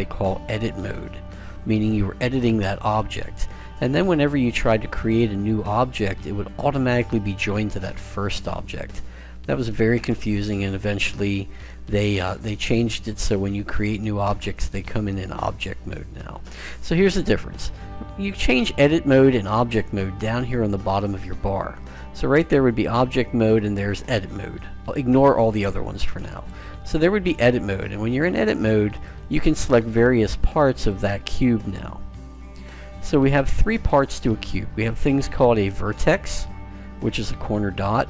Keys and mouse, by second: 29.2-38.0 right drag.